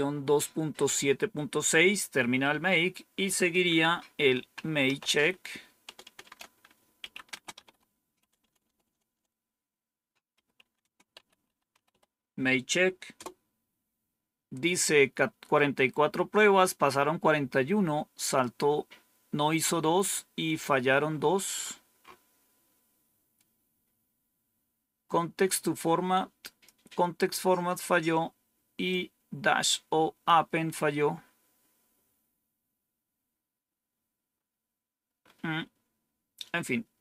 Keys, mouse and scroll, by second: 1.9 Up, 2.4 Down, 4.0-12.3 typing, 21.0 scroll up 2, 25.4-26.6 drag, 28.8-30.2 drag, 31.0-31.8 scroll down 2, 31.8 scroll down 1, 33.7-35.1 scroll down 1, 35.1-36.5 scroll down 1.